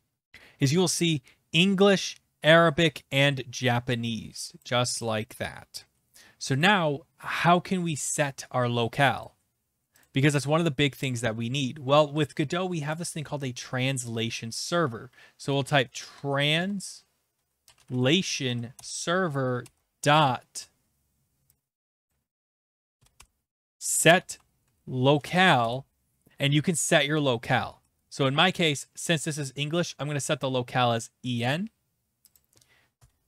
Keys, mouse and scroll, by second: 1.8 click, 4.6 click, 5.0 click, 6.6 click, 9.2 click, 10.0 click, 12.3 click, 12.8 Return, 15.4-20.1 typing, 18.7 Return, 22.1 click, 22.4-25.3 typing, 22.6 click, 25.6 Return, 26.5-28.1 typing, 31.5 click, 32.3 click, 32.9 Return.